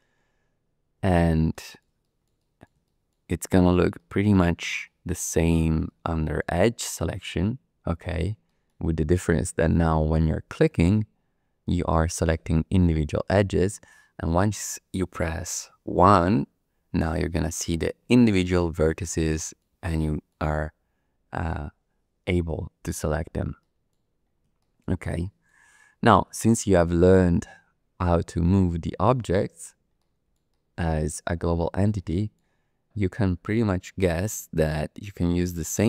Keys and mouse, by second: 1.1 shift+click, 1.5 click, 2.0 shift+middle click, 2.3-2.6 typing, 2.4 middle click, 2.8 shift+middle click, 3.0 shift+click, 3.4 click, 3.9 shift+click, 4.8 shift+click, 5.8 shift+click, 8.4 shift+middle click, 9.2 shift+middle click, 9.4 shift+click, 10.7 click, 11.6 click, 12.2 click, 12.9 click, 13.9 shift+middle click, 14.2 shift+click, 16.1 1, 18.4 shift+click, 19.2 click, 19.5 middle click, 19.8 shift+middle click, 20.0 shift+click, 20.1 shift+middle click, 22.4 middle click, 23.6 middle click, 23.8 click, 24.6 shift+click, 25.2 shift+click, 25.7 middle click, 26.4 shift+middle click, 30.0 shift+middle click, 30.2 shift+click, 30.5 click, 31.9 shift+click, 34.0 shift+middle click, 34.5 shift+click, 35.5 3.